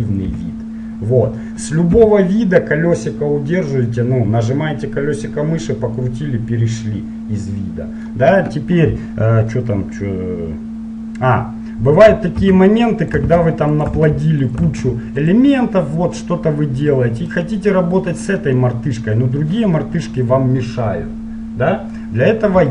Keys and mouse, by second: 0.0 KP_5, 0.4 KP_5, 2.2 KP_7, 5.5 click, 6.4 middle click, 11.8 middle click, 12.6 shift+d, 13.2 click, 13.5 shift+d, 14.2 shift+d, 14.9 shift+d, 15.7-17.3 drag, 17.5-19.2 right drag, 19.2 middle click, 20.0 middle click, 22.1-22.7 middle drag.